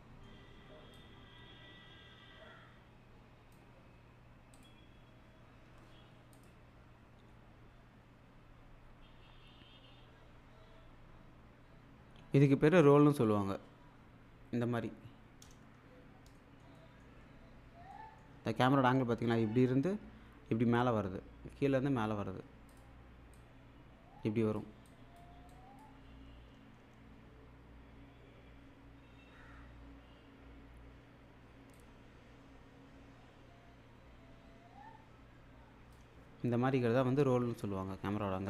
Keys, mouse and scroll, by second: 0.0-0.6 middle click, 1.0-3.7 drag, 16.2 click, 16.4 alt+middle click, 17.3-17.6 scroll up 1, 17.9 shift+middle click, 22.7-24.6 drag, 31.8-36.2 drag.